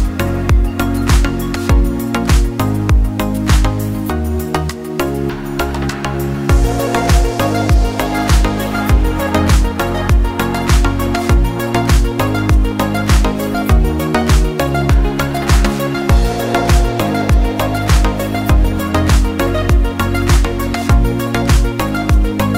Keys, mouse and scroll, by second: 6.8 scroll up 1, 9.1 click, 20.6 scroll down 1, 21.5 click.